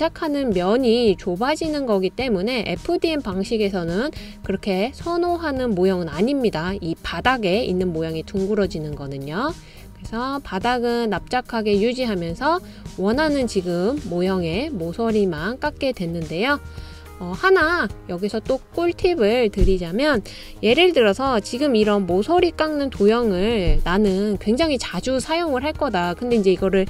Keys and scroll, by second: 23.7 super+c, 23.9 super+v.